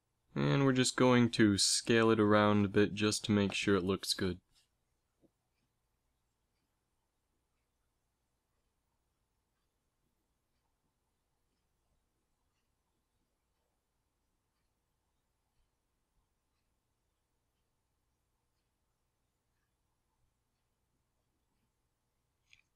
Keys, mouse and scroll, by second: 0.5 KP_1, 0.8 z, 2.6 s, 5.4 g, 7.2 g, 8.6 s, 11.7 middle click, 12.1 a, 17.7 l, 18.3 s, 19.6 s, 22.1 a.